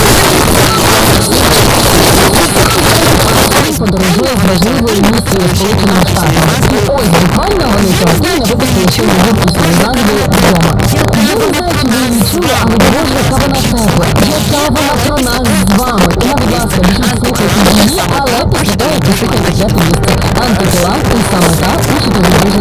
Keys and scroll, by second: 0.2 Page_Down.